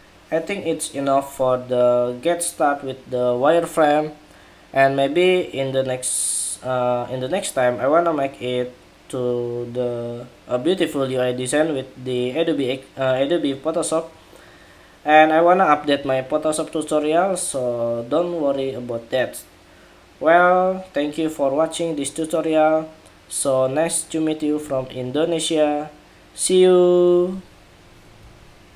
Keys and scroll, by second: 28.5 shift+super+2.